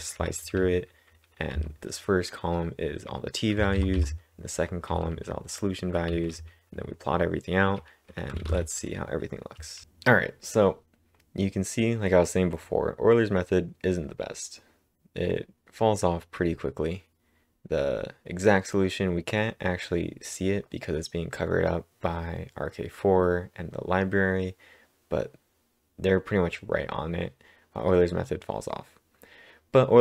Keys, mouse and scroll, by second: 3.5-6.6 typing, 8.1-8.8 typing.